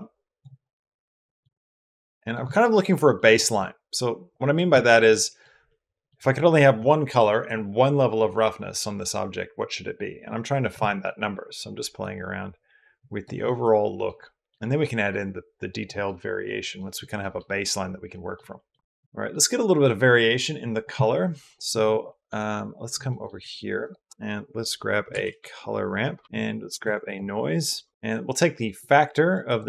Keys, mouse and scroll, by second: 0.4-1.2 drag, 0.4-1.2 middle drag, 1.4-2.2 drag, 1.4-2.2 middle drag, 2.3 shift+drag, 2.5 middle drag, 2.9 middle click, 4.1 click, 4.6 shift+drag, 4.9 middle drag, 5.5 middle click, 11.9-13.1 drag, 13.3-13.9 middle drag, 14.0 middle drag, 14.4-15.7 middle drag, 15.9-16.4 middle drag, 16.6 middle drag, 17.0 middle click, 17.9 middle drag, 18.4 middle click, 18.7 shift+middle click, 18.9 click, 21.9 click, 22.9 click, 23.2 shift+a, 26.6 shift+a, 27.9 BackSpace, 28.6 click, 28.7 click.